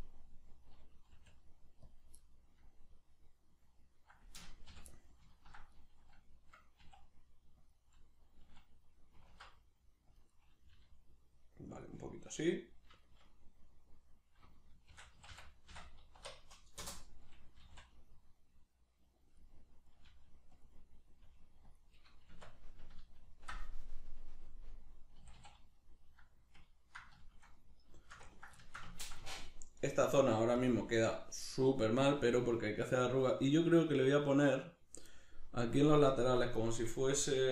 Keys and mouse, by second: 2.0 click, 2.2-7.7 middle drag, 4.7 l, 6.8 s, 7.7 click, 7.8-10.2 middle drag, 9.3 alt+s, 10.2 click, 10.3-11.8 middle drag, 10.8 g, 11.8 click, 12.0-14.9 middle drag, 14.9 shift+d, 16.9 Return, 17.1 middle click, 17.6 g, 19.4 click, 19.4 middle click, 20.1 g, 20.7 click, 20.8 middle click, 21.2 g, 21.8 middle click, 22.3 Tab, 23.0 ctrl+middle click, 25.2 a, 25.8 middle click, 26.7 ctrl+middle click, 27.2 shift+middle click, 27.6 middle click, 28.0 shift+middle click, 28.3 ctrl+middle click, 28.9-30.1 ctrl+middle drag, 30.1 right click, 36.6-37.5 middle drag.